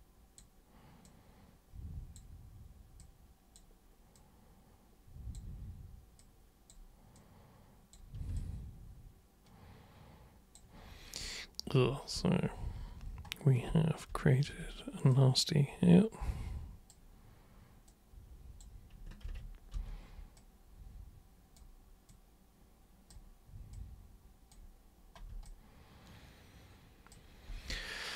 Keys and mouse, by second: 1.0 super+click, 3.0 super+click, 4.2 super+click, 6.2-6.7 super+drag, 7.2 super+click, 8.3-10.6 alt+super+drag, 15.1-16.9 super+drag, 17.9 super+click, 19.2 ctrl+super+z, 19.8 super+n, 20.4 super+click, 22.1-23.1 super+drag, 23.7 super+click, 25.4-27.1 alt+super+drag.